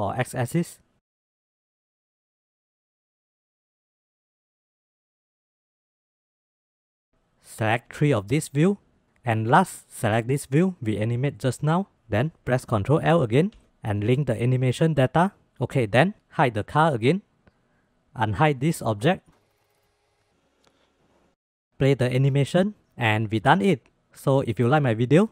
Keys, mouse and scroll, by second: 2.7-3.2 drag, 3.3 space, 5.2 space, 5.4-5.8 middle drag, 6.1 click, 6.7 shift+click, 7.1-7.6 drag, 8.8 click, 12.8 ctrl+l, 15.2 space, 17.3-17.9 drag, 18.6-19.0 drag, 19.5 shift+click, 19.6 click, 19.8 shift+click, 20.0 click, 20.9-25.3 drag.